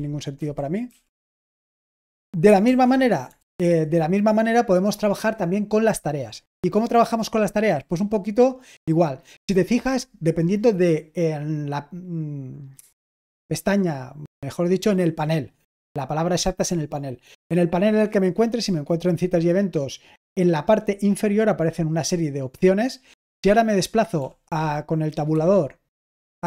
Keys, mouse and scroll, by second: 0.0-1.8 typing, 2.6 super+l, 3.3 super+l, 25.2 Tab, 25.2 typing, 26.1 Tab.